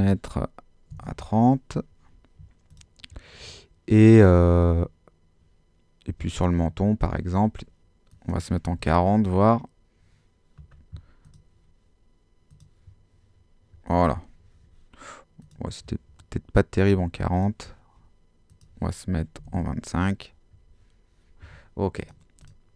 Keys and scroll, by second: 0.7-1.5 typing, 8.5-9.3 typing, 19.1-20.1 typing.